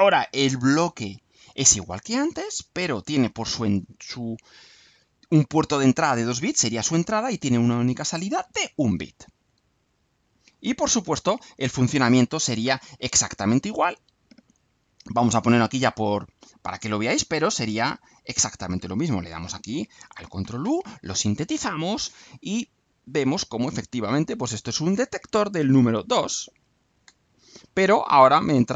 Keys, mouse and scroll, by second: 0.0-1.7 drag, 2.3-3.2 drag, 8.0-8.8 drag, 9.2 right click, 10.1 scroll up 2, 10.5-11.7 right drag, 12.5-14.2 drag, 15.5 click, 16.7 click, 17.4 scroll down 1, 17.8 right click, 18.7 click, 19.4 ctrl+u.